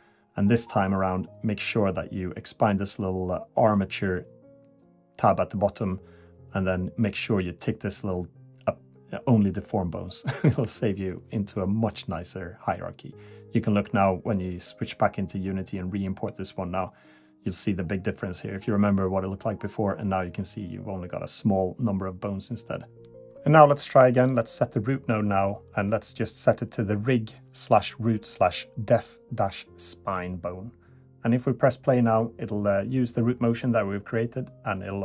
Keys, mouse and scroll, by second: 1.1 click.